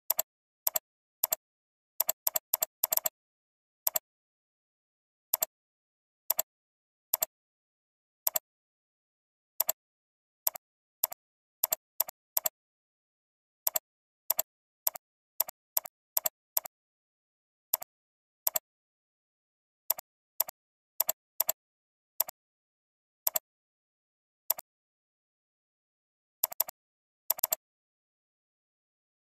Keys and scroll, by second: 26.8 alt+space, 28.6 ctrl+space.